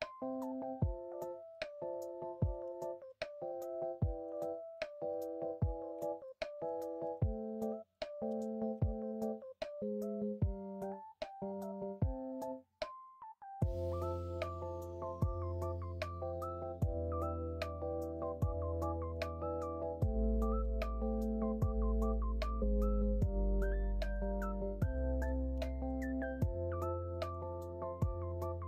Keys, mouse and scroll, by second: 2.5 ctrl+z, 3.2 ctrl+r, 5.9 1, 7.0 ctrl+b.